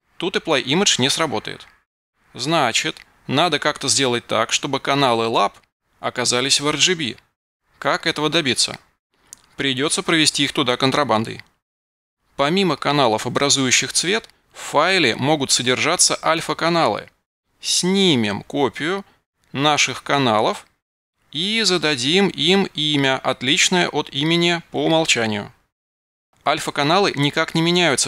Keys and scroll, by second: 14.6 super+v, 18.8 a, 19.3 super+v, 22.9 b, 23.6 super+v.